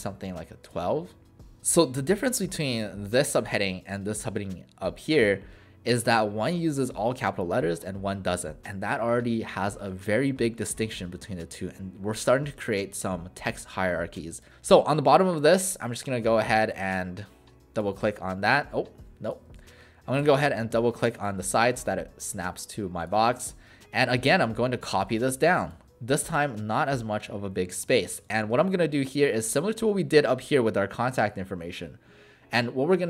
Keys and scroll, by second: 19.5 ctrl+z, 20.2 v, 28.6 ctrl+a.